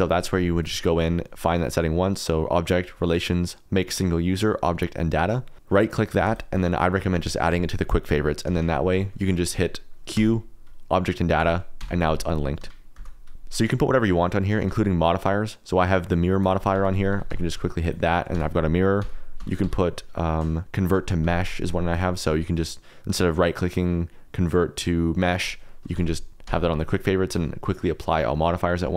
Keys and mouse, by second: 0.6-8.6 right drag, 8.6 Escape, 9.3 middle click, 9.7 middle click, 10.1 q, 11.8 Tab, 12.0 g, 12.6 Escape, 12.9 Tab, 13.3 Tab, 13.5 middle click, 14.6 q, 16.7 Tab, 16.9 a, 17.1 g, 17.3 x, 17.8 click, 18.0 middle click, 18.3 Tab, 19.0 Tab, 19.4 Tab, 19.6 q, 21.9-25.4 drag, 26.0 ctrl+z, 26.4 q.